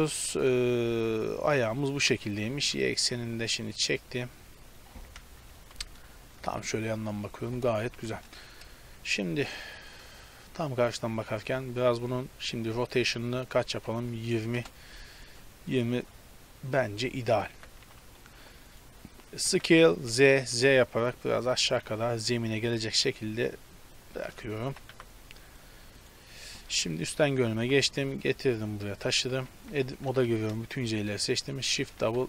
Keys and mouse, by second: 0.8-1.8 middle drag, 2.4 g, 5.2 KP_1, 5.6 z, 7.8 KP_7, 8.8 KP_3, 10.3-11.4 middle drag, 13.0 r, 15.3 click, 17.7 s, 19.4 s, 24.4-26.0 middle drag, 24.8 z, 25.0 a, 26.0-26.9 right drag, 26.9 KP_7, 27.2 z, 27.6 g, 29.4 z, 29.7 Tab, 30.1 a, 30.3 a, 31.8 shift+d.